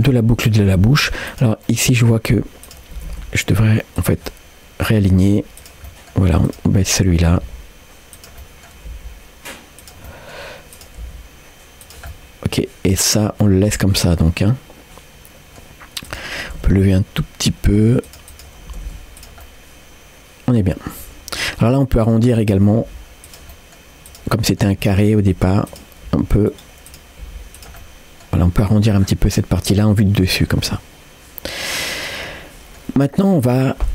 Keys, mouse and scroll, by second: 1.3 click, 1.7 middle click, 2.1 scroll up 1, 2.7 click, 3.0 g, 4.3 middle click, 5.1 g, 5.9 middle click, 6.5 click, 6.8 middle click, 7.2 g, 8.4 middle click, 8.9 g, 10.1 middle click, 10.8 click, 11.0 g, 12.1 middle click, 13.4-15.6 middle drag, 16.1 click, 16.5 g, 18.3 click, 18.7 g, 19.4-20.6 middle drag, 21.4 middle click, 22.0 click, 22.5-22.8 scroll up 1, 22.8 g, 23.5 middle click, 24.1 click, 24.4 middle click, 24.8 g, 25.7 click, 26.1 g, 26.9 click, 27.3 g, 27.8 middle click, 29.0 scroll down 1, 29.4-32.8 middle drag, 33.4-33.9 drag.